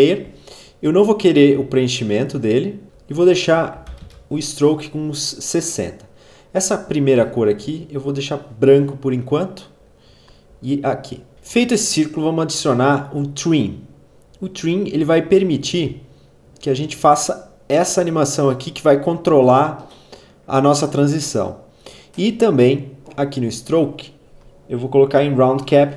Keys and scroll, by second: 3.5-4.4 typing, 11.3 v.